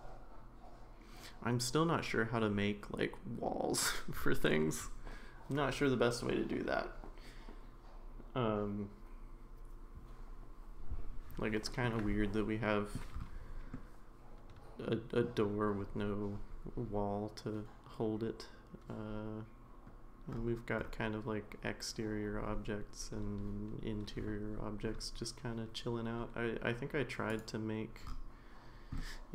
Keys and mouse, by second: 11.8-13.0 middle drag, 13.8-15.3 middle drag, 27.3 click, 29.0-29.3 middle drag.